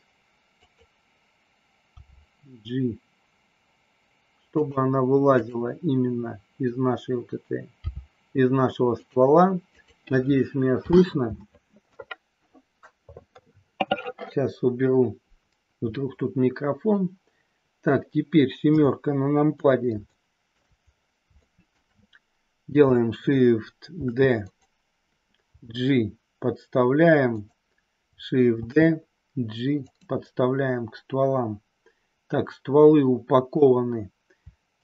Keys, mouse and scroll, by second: 0.5 click, 1.9 g, 4.5 click, 5.3 click, 7.7 g, 9.0 click, 9.6 click, 18.6 KP_7, 20.0 shift+middle click, 21.4 shift+middle click, 23.9 shift+d, 24.4 click, 25.5 g, 27.3 click, 28.6 shift+d, 29.9 click, 30.3-33.6 middle drag, 34.7 shift+click.